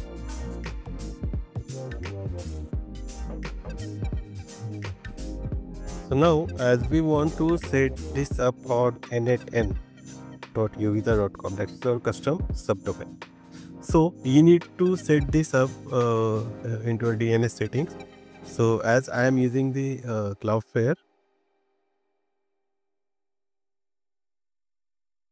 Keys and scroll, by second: 12.2 Up, 12.4 Right, 13.0 BackSpace, 20.6 Right, 21.8 Down.